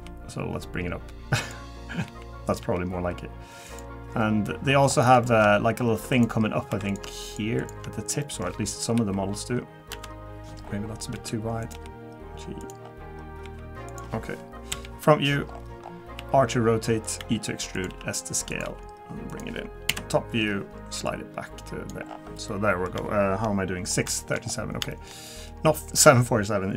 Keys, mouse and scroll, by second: 2.0 r, 2.6 g, 4.0-4.4 scroll down 2, 4.4 middle click, 4.9-5.6 scroll up 5, 5.2 shift+middle click, 6.1 click, 6.7 3, 6.9 click, 7.2 shift+click, 7.6 click, 8.2 middle click, 8.9 KP_1, 9.9 KP_7, 10.6-11.1 scroll down 5, 11.1 s, 11.7 g, 12.8-13.2 scroll down 2, 13.2 scroll up 1, 13.4 g, 14.7 KP_1, 15.5-15.9 scroll up 9, 16.2 r, 17.2 e, 17.9 s, 18.6 g, 19.9 KP_7, 21.0 click, 22.0-22.5 scroll down 5, 22.5 middle click, 23.9 scroll down 2, 24.2 shift+middle click, 24.4-24.9 scroll up 3, 24.9 shift+middle click, 25.3 middle click, 26.2 middle click.